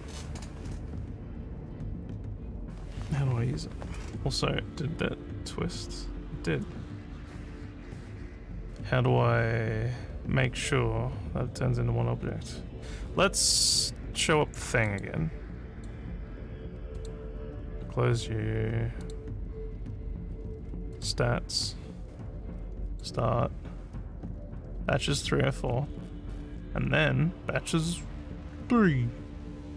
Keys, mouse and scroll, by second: 14.2 click, 14.9 click, 15.8 click, 17.0 click, 19.0 click, 21.0 click, 22.9 click.